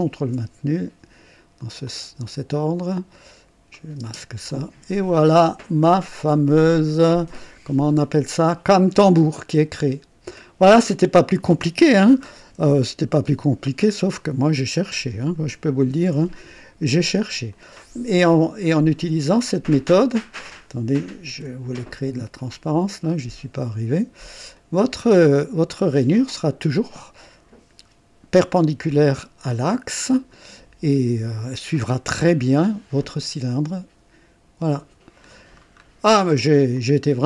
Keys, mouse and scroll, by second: 1.8 click, 3.7 click, 4.0 space, 4.5-6.5 drag, 7.4 click, 8.4 click, 9.4-11.8 drag, 12.6 KP_1, 13.6 scroll up 1, 13.8-14.5 typing, 14.0 right click, 15.9 ctrl+d, 16.0 typing, 17.5-19.3 drag, 19.5 click, 20.3 click, 21.3 ctrl+d, 22.9-24.3 drag, 24.5 click, 32.2-35.4 drag, 35.5-36.0 scroll down 1, 36.7 click.